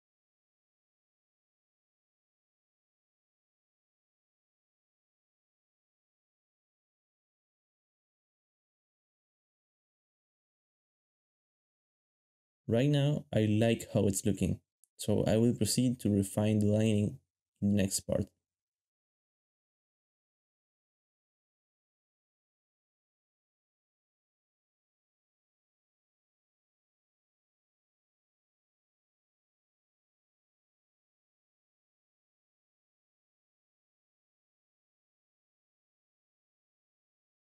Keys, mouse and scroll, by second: 4.3 ctrl+b, 4.7 shift+middle click, 5.3 alt+shift+z, 5.4 alt+shift+z, 6.6 alt+shift+z, 7.6 alt+shift+z, 7.8 alt+shift+z, 8.2 alt+shift+z, 15.9 ctrl+s.